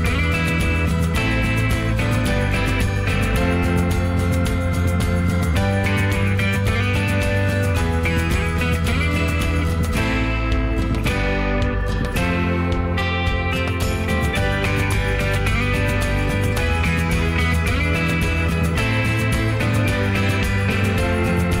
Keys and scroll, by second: 0.4 ctrl+a, 1.8 ctrl+h, 2.5 s, 7.0 m, 13.8 m.